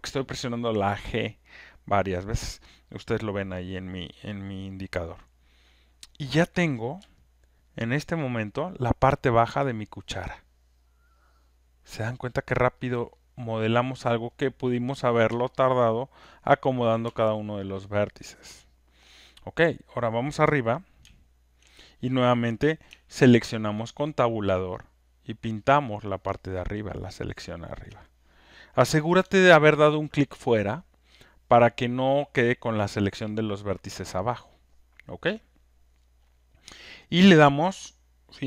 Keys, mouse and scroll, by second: 7.9 alt+middle click, 8.8 alt+click, 9.7 alt+right click, 12.1 alt+click, 12.3 alt+scroll, 12.7 alt+right click, 13.1 alt+middle click, 14.1 alt+click, 16.1 alt+click, 19.0 alt+click, 19.8 click, 22.8 Tab, 23.4-27.8 Tab, 27.8 click, 32.1 alt+click, 33.8 alt+click, 35.5 alt+click.